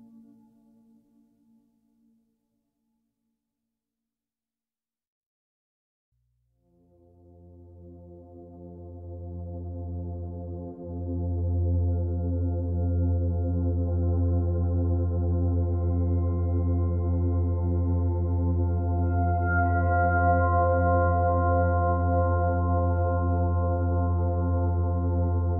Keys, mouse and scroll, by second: 0.1 click, 0.3 b, 1.3 g, 2.3 r, 2.8 g, 4.5 click, 4.7 b, 5.2 g, 6.1 shift+click, 6.5-9.1 typing, 8.5 click, 10.0 Tab, 10.2 click, 10.4 Tab, 11.5 click, 11.7 b, 12.8 g, 14.6 ctrl+r, 17.2 click, 18.3 Tab, 18.7-19.1 scroll down 7, 19.1 click, 19.4-20.0 scroll down 2, 20.0 click, 20.1 b, 20.6 o.